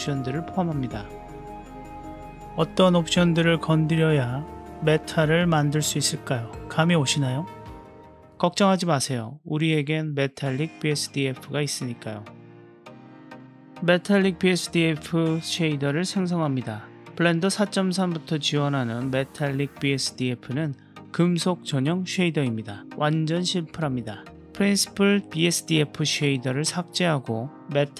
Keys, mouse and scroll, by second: 14.1 shift+a, 25.3 Delete.